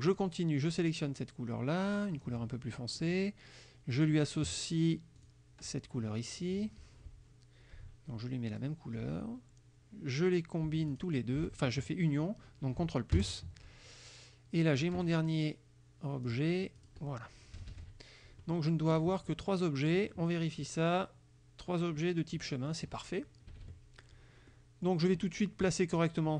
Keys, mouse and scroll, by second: 0.1 click, 2.0 click, 3.0 click, 4.0 click, 5.3 click, 8.6 click, 11.0 shift+click, 14.8 click, 16.3 click, 16.8 click, 17.6 KP_Subtract, 19.3 click, 22.7 click, 23.5 KP_Subtract, 24.5 click, 25.3 click, 26.0 click.